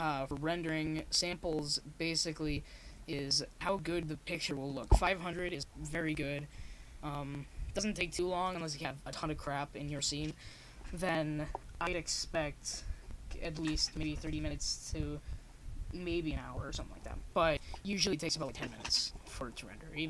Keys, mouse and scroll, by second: 10.6-12.2 drag, 12.2-20.0 middle drag.